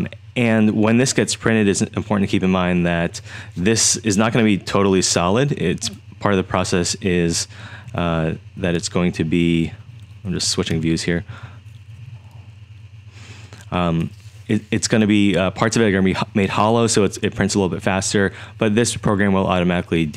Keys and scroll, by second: 4.4-5.2 typing, 7.8-9.7 typing, 10.7 5, 11.3 6, 11.9 4.